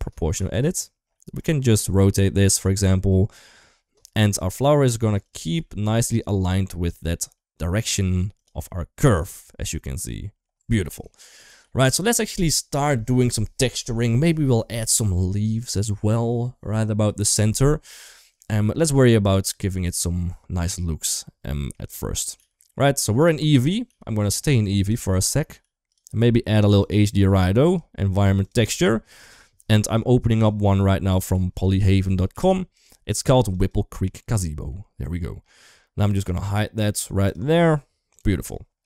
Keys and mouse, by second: 0.1 g, 2.7 r, 5.4 r, 8.5-10.2 middle drag, 10.5 Tab, 10.9 shift+middle drag, 11.1 middle click, 11.4 ctrl+s, 12.0 middle click, 17.8 middle click, 19.0 click, 19.9-20.3 middle drag, 21.4 middle click, 21.9 click, 22.1 g, 23.2 middle drag, 23.6 g, 24.2 middle drag, 24.7 shift+middle click, 25.0 middle click, 25.3 g, 27.4-28.5 drag, 29.0 click, 34.5 middle click, 36.0 click, 37.0 click, 38.7 shift+middle drag.